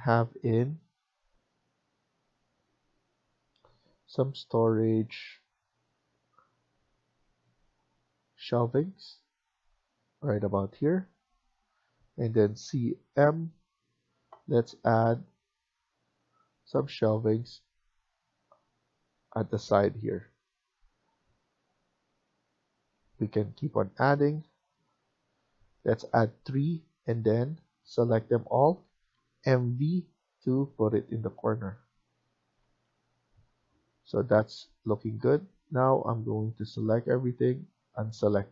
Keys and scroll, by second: 13.9-14.6 typing, 25.5 Escape, 25.8 Escape, 29.1-29.6 typing, 32.5 Escape, 32.8 Escape.